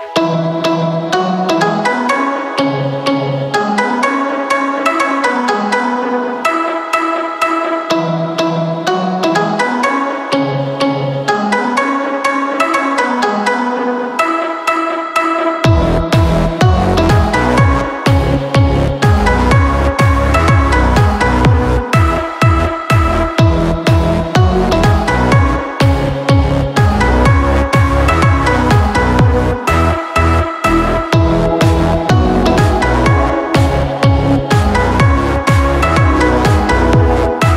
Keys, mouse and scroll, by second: 28.1 ctrl+t.